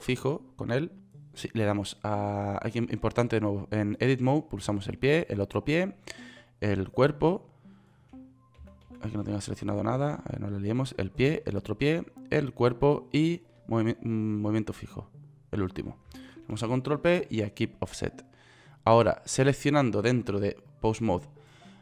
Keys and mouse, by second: 4.6-5.8 right drag, 9.2-10.5 typing, 17.1 ctrl+p.